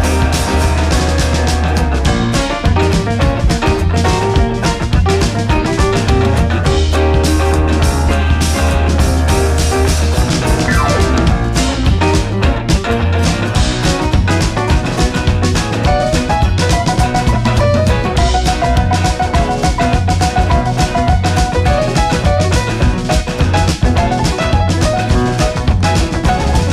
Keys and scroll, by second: 23.0 ctrl+a, 25.2 ctrl+a, 25.4 Escape.